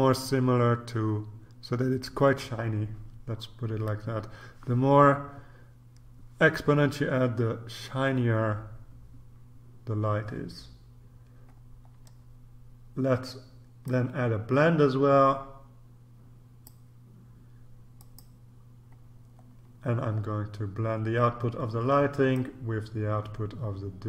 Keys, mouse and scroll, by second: 11.9-12.6 scroll down 1, 13.8-17.2 drag, 18.0 click, 19.5-20.4 scroll down 2, 22.3-24.0 drag.